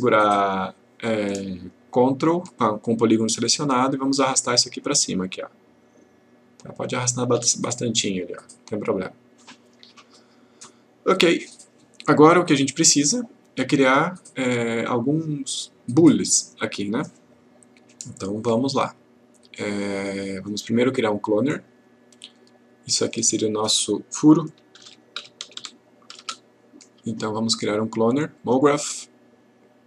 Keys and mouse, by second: 0.6 click, 4.2-7.6 ctrl+click, 14.9-15.8 click, 16.4-17.0 click, 23.0 click, 24.8 shift+f, 28.4-29.8 click.